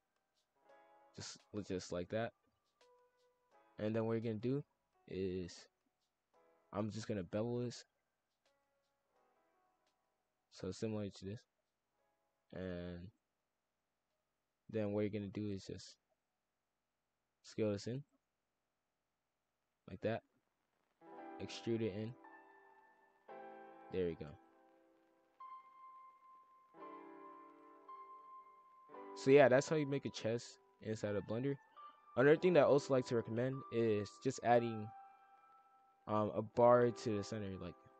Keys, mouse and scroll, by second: 1.3 s, 3.1 shift+f, 6.8 click, 8.3 click, 8.9 shift+click, 9.6 ctrl+b, 10.8 shift+f, 12.3 click, 13.1 shift+f, 14.4 shift+click, 14.9 shift+f, 16.2 e, 16.8 ctrl+z, 17.2 s, 18.1 shift+f, 19.1 click, 20.8 click, 21.9 e, 22.3 s, 23.3 e, 24.3 shift+f, 27.2 click, 28.0 shift+f, 33.0 click, 34.3 click, 34.6-37.0 drag, 37.2 click, 37.8 click.